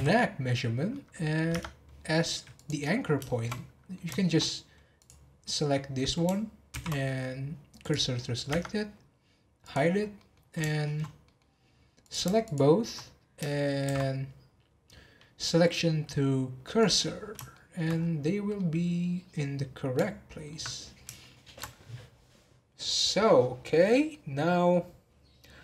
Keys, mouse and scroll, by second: 0.0 n, 0.7 scroll down 1, 0.9-1.5 middle drag, 1.5 Tab, 2.5 click, 2.9 scroll up 1, 3.2-4.4 shift+middle drag, 4.4 scroll up 2, 5.0 click, 5.4-6.7 middle drag, 6.7 shift+s, 8.1-8.5 scroll down 1, 8.5 Tab, 8.7-9.6 scroll down 1, 9.6 click, 9.9 scroll down 1, 10.1-11.5 middle drag, 11.5-12.0 scroll up 1, 12.0 click, 12.4 shift+click, 13.8 shift+s, 17.1-17.5 scroll down 1, 17.5-17.9 shift+middle drag, 17.9-18.3 scroll up 10, 18.5-20.7 middle drag, 20.7 scroll down 1, 21.2-21.7 shift+middle drag, 21.7-22.2 scroll up 10, 23.5 scroll down 2, 24.1 middle click, 24.7 scroll down 2.